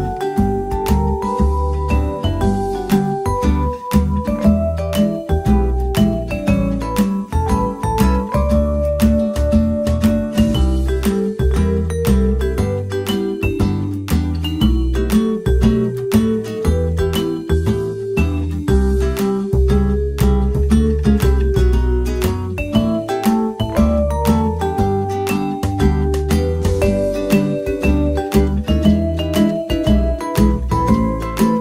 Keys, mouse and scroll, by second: 1.6 alt+s, 5.9 Tab, 7.0 KP_5, 9.7-11.7 drag, 11.0 shift+d, 11.8 click, 12.4 right click, 12.4 r, 14.7-16.2 middle drag, 16.2-18.5 drag, 18.9-20.5 right drag, 19.8 ctrl+j, 20.6-22.3 middle drag, 22.3-24.2 drag, 24.2 middle click, 24.5-25.1 middle drag, 25.1-26.9 drag, 27.4 click, 27.6-28.2 middle drag, 28.2 click, 28.5-29.3 middle drag, 30.8-31.6 middle drag.